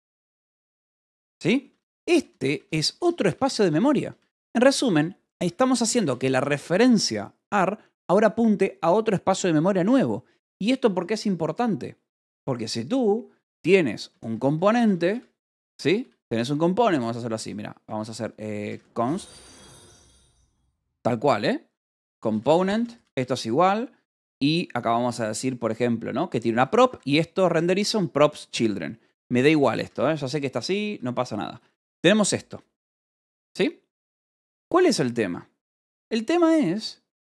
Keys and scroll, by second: 0.3-2.2 typing, 4.7 Escape, 5.1 h, 6.0 b, 9.7 Escape, 10.2 0, 12.8-16.3 typing, 13.3 Return, 17.8 Return, 18.5-23.0 typing, 25.6 shift+9, 26.8 Escape, 27.1-31.2 typing, 34.8 h, 36.1-37.2 typing.